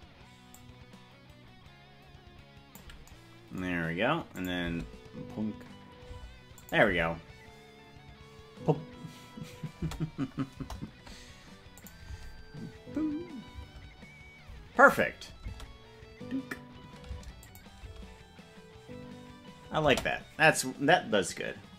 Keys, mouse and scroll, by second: 0.6-2.9 drag, 4.5 click, 4.7 space, 6.3 space, 6.7-8.6 drag, 6.9 space, 10.1 space, 10.7 KP_0, 12.0-14.7 drag, 12.2 space, 13.8 space, 15.0 click, 15.6 space, 17.4 space, 17.6 click, 18.0 space, 20.2 space.